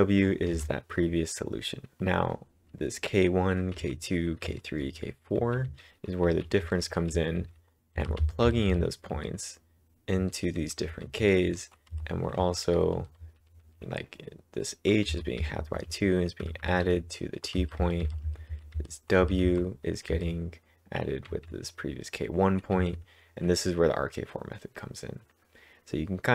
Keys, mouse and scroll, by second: 0.0-2.0 typing, 3.5-10.2 typing, 11.2 typing, 13.4 l, 15.1-18.1 typing, 20.0-22.8 typing.